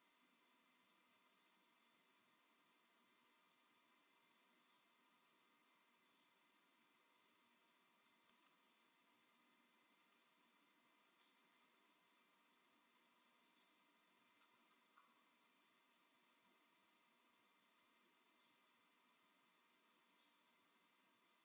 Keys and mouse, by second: 1.0 Tab, 1.9 Tab, 3.0 Tab, 9.0 Tab, 9.8 Tab, 11.3 KP_1, 14.6 middle click, 14.8 middle click, 16.4 alt+h.